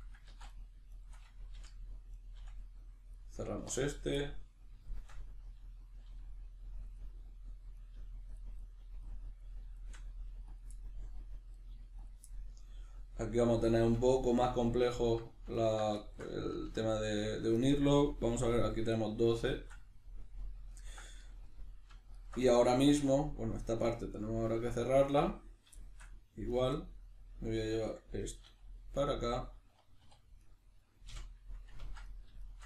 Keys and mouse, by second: 0.3 ctrl+z, 0.5 right click, 0.9 shift+right click, 1.5 f, 2.1 right click, 2.4 f, 2.6-3.9 middle drag, 3.6 1, 3.9 right click, 4.2-7.8 middle drag, 6.1 g, 6.9 click, 7.8 right click, 7.9 g, 8.4 click, 8.6 right click, 8.8 g, 9.1 click, 9.4 right click, 9.8 shift+right click, 10.1 g, 10.6 click, 10.7 middle click, 11.5 right click, 11.7 g, 12.1 click, 12.3-14.9 middle drag, 14.9 alt+right click, 15.5 alt+right click, 16.0-22.1 shift+middle drag, 22.1 alt+right click, 22.4-26.5 middle drag, 26.5 right click, 26.8-29.5 middle drag, 28.5 e, 29.5 click, 30.0 2, 30.4 right click, 31.1 f, 32.1 right click, 32.4 shift+right click.